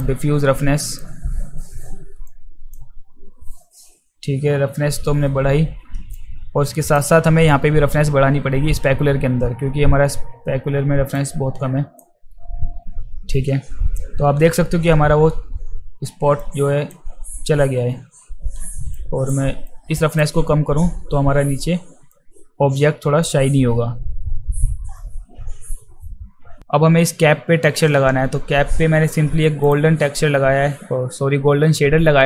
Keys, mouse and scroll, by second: 0.9 click, 2.3-2.7 drag, 6.2 click, 11.2-12.0 drag, 16.4 click, 19.0 click, 19.7-20.2 drag, 22.1-23.2 drag.